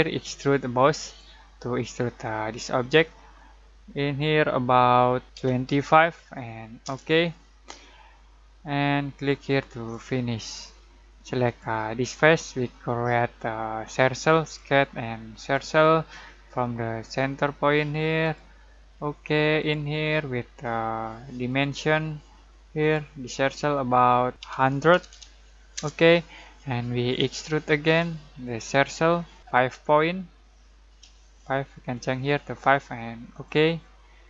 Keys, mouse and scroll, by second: 1.0 click, 5.3 typing, 6.8 Return, 9.2-11.4 drag, 14.3 click, 18.2 click, 24.9 typing, 25.7 Return, 27.8 click, 31.0 5, 33.3 click.